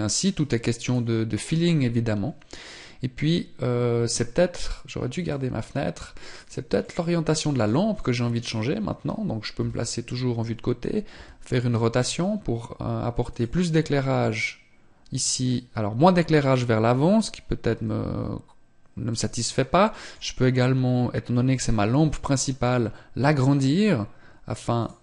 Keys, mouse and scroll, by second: 0.2 click, 5.1 click, 6.7 middle click, 8.0 right click, 9.4 KP_3, 11.0 r, 17.5 r, 19.3 middle click, 21.9 s.